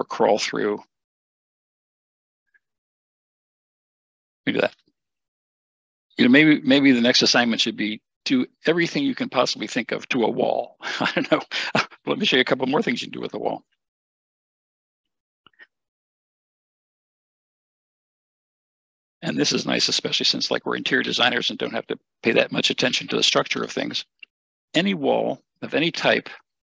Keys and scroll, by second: 15.9 typing, 22.6 Escape, 22.8 Escape.